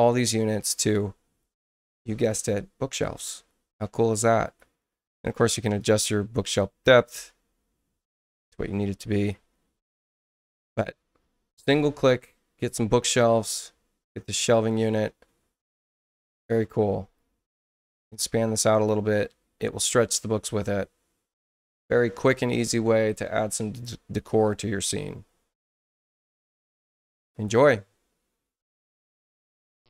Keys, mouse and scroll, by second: 0.7 space, 4.4 click, 5.8-8.1 drag, 13.5 click, 17.2 click, 19.3 space, 28.5 shift+F1.